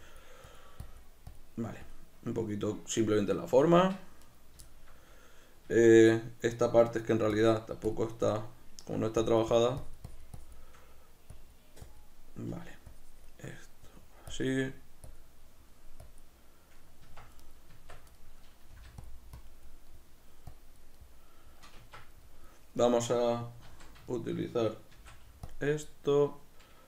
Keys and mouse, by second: 3.7 b, 3.9 Tab, 3.9 click, 4.2 right click, 4.7-7.3 shift+middle drag, 5.7 Tab, 5.8 b, 7.3 shift+click, 15.4 middle click, 16.0 click, 16.8 middle click, 17.0 b, 17.2 Tab, 17.4 right click, 17.7 Tab, 18.2 middle click, 19.1 click, 19.9 middle click, 20.5 click, 21.0-23.7 middle drag, 21.8 b, 22.0 Tab, 23.7 alt+q, 24.1-25.6 shift+middle drag, 24.9 shift+d, 25.6 click.